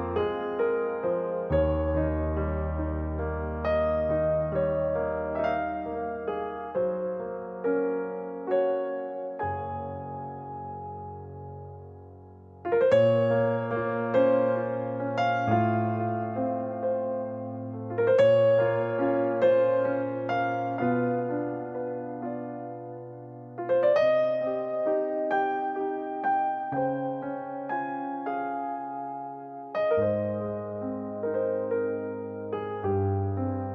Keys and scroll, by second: 2.4 space, 4.7 h, 9.2 u, 15.0 ctrl+z, 16.3 space, 20.5 space.